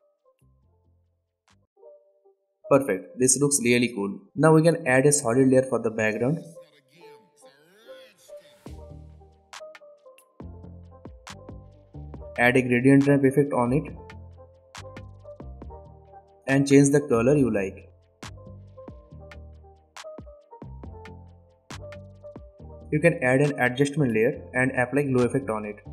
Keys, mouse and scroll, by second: 1.6 space, 3.1 click, 3.2 right click, 3.8 click, 8.5-9.4 typing, 10.5 click, 12.6 click, 13.3-14.3 typing, 15.4 d, 16.3 click, 20.4 alt+scroll down 1, 21.3-21.9 click, 21.9 space, 23.2 click, 23.4 right click, 23.9 click.